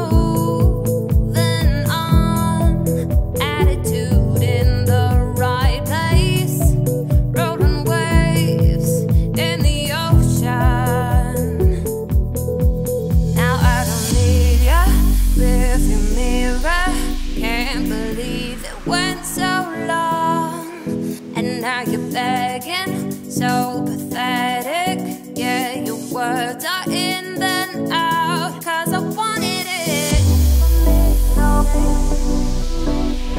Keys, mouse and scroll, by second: 0.9-1.6 shift+middle drag, 1.6-2.0 scroll up 2, 2.0-3.7 shift+middle drag, 3.7-4.5 scroll up 2, 4.5 shift+middle click, 5.5-5.8 scroll up 1, 5.8 click, 6.0 scroll up 2, 6.3-7.7 shift+middle drag, 7.7-8.8 drag, 8.8 ctrl+z, 9.5-10.4 middle drag, 10.4 shift+click, 11.3 click, 12.5-13.8 drag, 14.6 click, 15.4 x, 17.3 ctrl+z, 18.1 click, 18.6 z, 18.9 click, 19.5 click, 20.1 click, 20.9 shift+click, 21.7 x, 22.2 z, 22.4 scroll down 5, 22.6-23.4 middle drag, 23.4 ctrl+s, 24.1 click, 24.5-24.9 middle drag, 24.9 scroll up 3, 25.1 `, 26.1-27.3 shift+middle drag, 27.3-28.0 scroll up 2, 28.0-28.4 shift+middle drag, 28.4 scroll up 3, 29.5 z, 30.9 z, 31.5 Tab, 31.9 click, 32.2 3, 32.7 click, 32.9 2, 33.1 click.